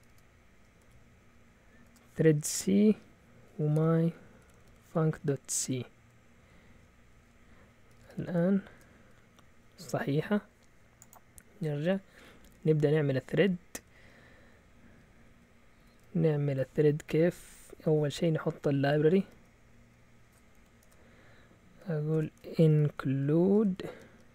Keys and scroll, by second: 0.0-1.8 typing, 3.4-6.1 typing, 7.1 Return, 7.6-9.4 typing, 12.9-13.9 typing, 15.2-15.9 typing, 19.0 typing, 19.3 Up, 19.7 Up, 20.5 End, 20.8 Return, 21.8-24.3 typing.